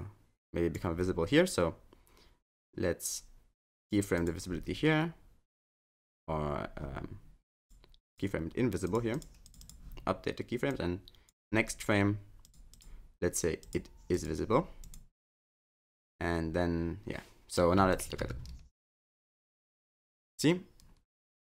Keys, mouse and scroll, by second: 3.8 click, 4.2 click, 7.6 click, 8.1 click, 8.8 click, 9.1 click, 9.4 click, 9.6 click, 10.7 click, 12.5 click, 12.7 click, 13.6 click, 14.1 click, 14.8 click, 16.1 click, 17.9 click, 18.2 space.